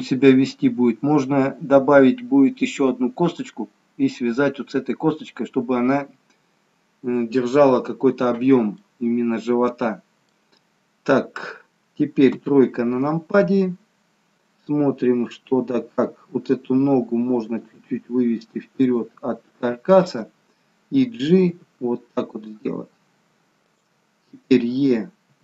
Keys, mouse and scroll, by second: 8.8 middle click, 12.3 KP_3, 17.5 g, 20.1 click, 21.6 g, 25.3 e.